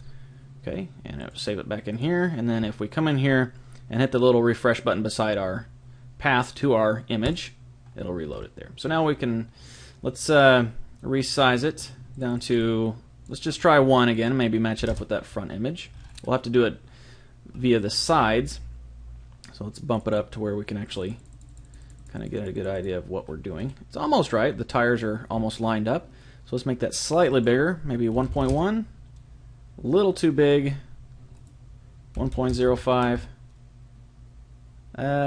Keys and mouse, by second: 7.2 click, 9.0-11.1 middle drag, 12.1-15.9 drag, 15.9-19.9 middle drag, 19.9-24.5 drag, 24.5-26.1 middle drag, 27.3 click, 30.6 middle click, 31.3 click.